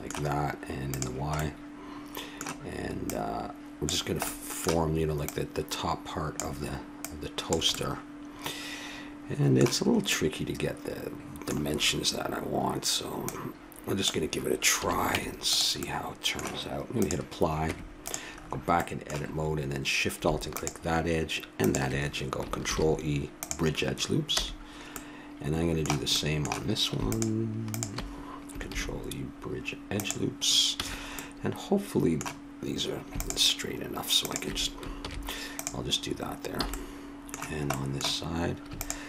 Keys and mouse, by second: 0.8-2.8 drag, 2.4 middle click, 3.0-5.0 drag, 4.8 middle click, 5.3-8.9 drag, 5.3-6.3 middle drag, 7.7 middle click, 10.1-12.3 middle drag, 13.2-14.7 drag, 14.7 a, 15.2 Tab, 15.9-17.0 middle drag, 17.0 click, 17.6 Tab, 20.5-22.7 drag, 22.7 ctrl+e, 24.4 a, 24.9 middle click, 27.1-28.8 drag, 28.7 ctrl+e, 30.8 a, 33.1-35.0 drag, 35.0 ctrl+e, 36.6 a, 36.7-38.6 middle drag, 38.8-39.0 drag.